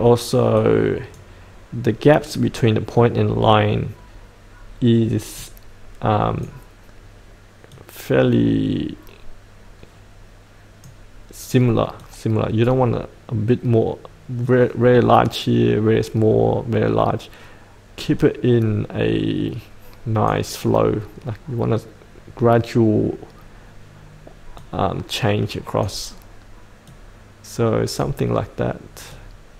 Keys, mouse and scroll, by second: 18.3-26.5 drag, 27.5-29.5 drag.